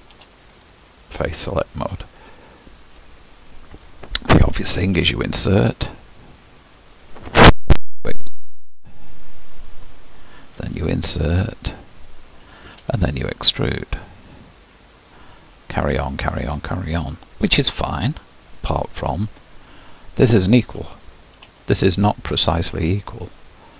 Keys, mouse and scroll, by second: 1.8-2.5 scroll up 1, 2.5-4.9 scroll up 2, 4.9 i, 7.8 e, 10.6 i, 12.8 e, 15.4-16.9 middle drag, 16.9-18.9 scroll up 2, 18.9-20.0 scroll up 1, 21.0-21.5 scroll down 1, 21.5 scroll down 1, 21.6-23.7 shift+middle drag.